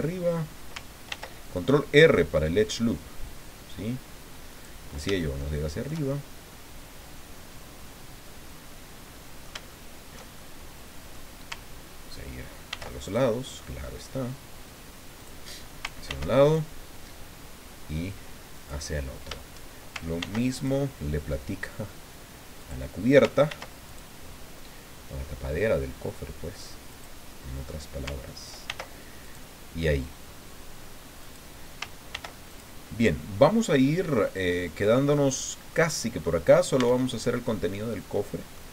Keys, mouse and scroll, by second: 1.1 ctrl+r, 1.5 ctrl+click, 4.5 click, 5.4 shift+click, 6.4-9.6 drag, 9.7 shift+click, 10.4 shift+click, 12.7 ctrl+r, 13.0 ctrl+click, 15.2 click, 16.0 ctrl+r, 16.4 ctrl+click, 18.5 click, 20.2 ctrl+r, 20.5 ctrl+click, 22.6 click, 23.5 ctrl+r, 23.8 ctrl+click, 26.9 click, 27.3 middle click, 28.7 ctrl+r, 29.2 ctrl+click, 31.2 click, 32.1 ctrl+r, 32.5 ctrl+click, 35.3 click, 35.7 middle click, 36.5 scroll down 2, 36.8 Tab, 37.1-38.7 drag.